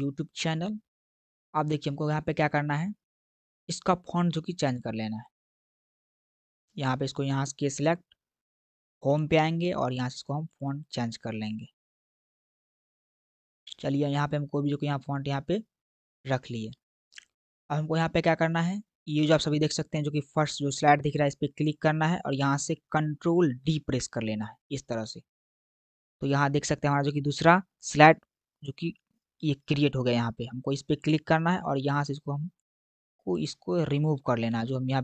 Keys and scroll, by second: 23.7 ctrl+d, 34.1 BackSpace.